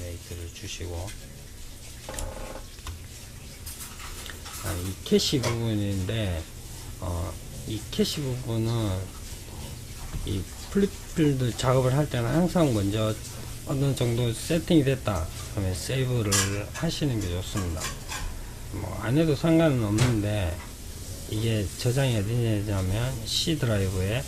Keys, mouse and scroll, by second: 3.2 click, 14.3-17.4 drag.